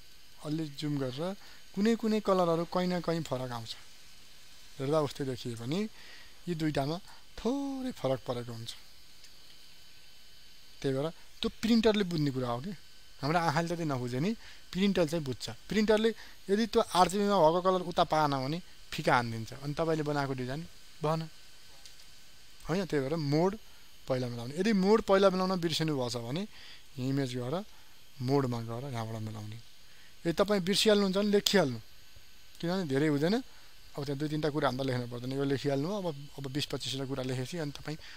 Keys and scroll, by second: 0.2 ctrl+space, 3.5 ctrl+space.